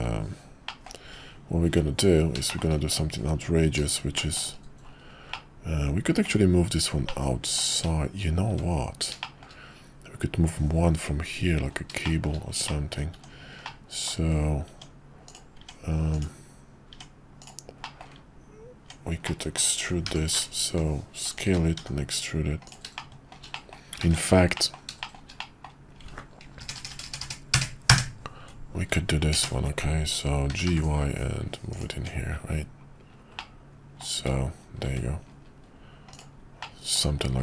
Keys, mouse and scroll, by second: 0.6 middle drag, 1.1 `, 1.7 `, 2.5 shift+middle click, 4.1 shift+middle click, 5.4-6.3 middle drag, 7.0-7.6 middle drag, 7.7 `, 8.5 `, 9.2 middle drag, 12.0 shift+middle drag, 12.7-13.0 middle drag, 13.1 Tab, 13.7 middle click, 16.1 click, 17.4 click, 17.9 middle click, 19.2 middle click, 20.1 i, 21.8 e, 23.1 shift+middle click, 23.6 middle click, 24.0 ctrl+z, 24.6 middle click, 25.0 shift+middle click, 25.4 middle click, 30.5 g, 31.9 Tab, 33.4 middle click, 34.2 `, 34.9 `, 36.1 click, 36.6-37.0 middle drag.